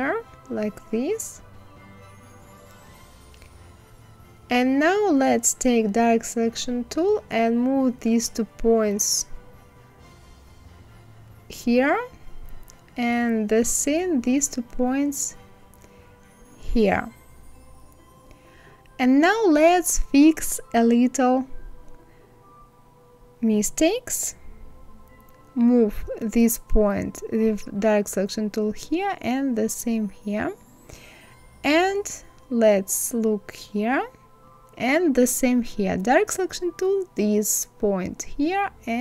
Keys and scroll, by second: 8.7 Left, 9.8 Left, 15.5 Right, 24.9 ctrl+z.